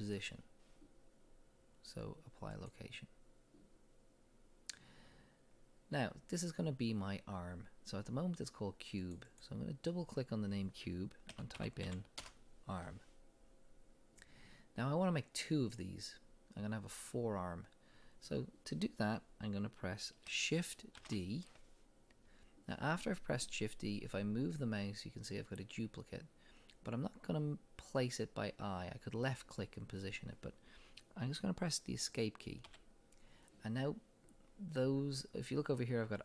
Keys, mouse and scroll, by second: 7.4-9.0 middle drag, 9.0 click, 9.3-13.6 drag, 12.3 Return, 16.3-20.7 drag, 21.0 shift+d, 22.7-36.2 drag, 32.8 Escape.